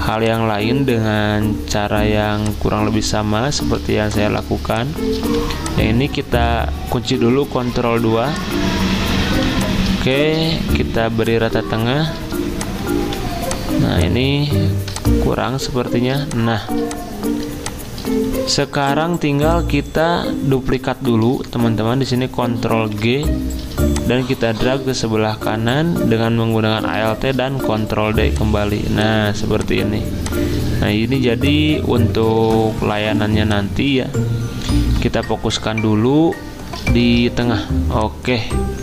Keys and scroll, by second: 3.8 z, 5.2 v, 7.6 ctrl+2, 9.3 z, 9.9 z, 13.0 v, 16.7 z, 18.8 v, 22.7 ctrl+g, 27.6 ctrl+d, 32.3 ctrl+z, 37.0 ctrl+g.